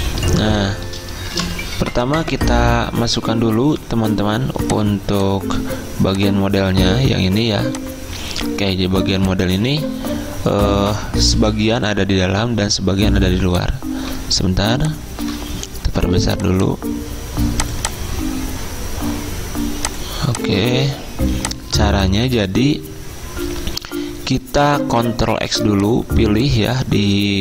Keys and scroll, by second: 1.4 v, 25.4 ctrl+x.